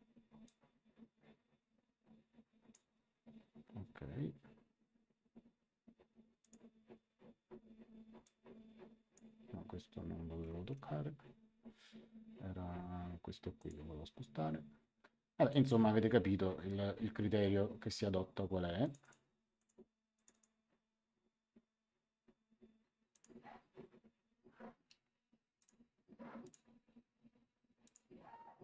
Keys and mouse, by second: 0.4 click, 6.4 click, 8.2 click, 10.6 Escape, 13.5 click, 15.4 click, 18.8 click, 23.1 click, 25.5 click, 27.8 ctrl+click.